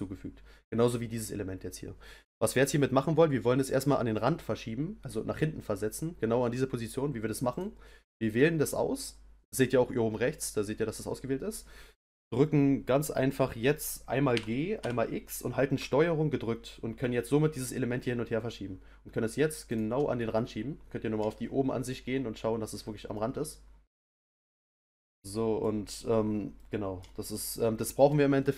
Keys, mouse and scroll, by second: 0.0 scroll down 1, 7.5 click, 8.0 click, 14.3 g, 20.2-26.1 middle drag, 26.5-28.5 middle drag.